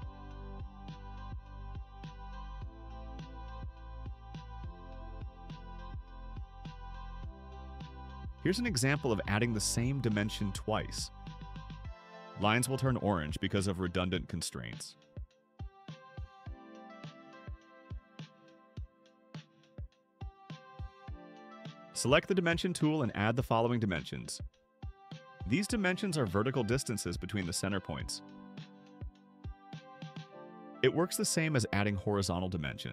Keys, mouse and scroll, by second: 0.7 click, 1.9 click, 3.1 click, 4.3 4, 4.9 Return, 10.6 click, 11.4 click, 12.9 4, 13.4 Return, 15.1 right click, 19.1 click, 21.7 click, 24.4 click, 25.5 click, 26.3 click, 28.0 click, 29.3 4, 29.7 Return.